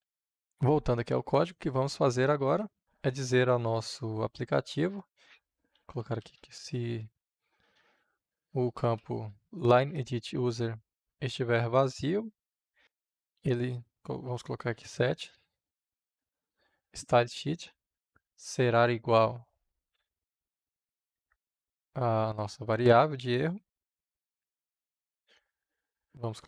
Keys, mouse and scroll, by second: 0.2-1.5 drag, 1.5-2.8 middle drag, 2.8 Return, 5.4-9.4 typing, 9.8 Return, 12.6-14.1 typing, 15.2 s, 15.3 Up, 15.8 Return, 16.0 Up, 16.1 s, 16.8 Down, 17.2 Return, 18.2 shift+9, 21.3-22.9 drag, 23.5 ctrl+c, 25.1 click.